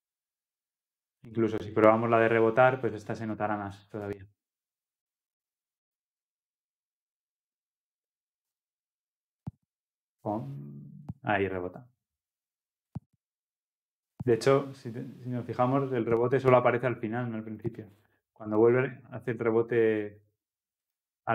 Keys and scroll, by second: 4.2 ctrl+F10.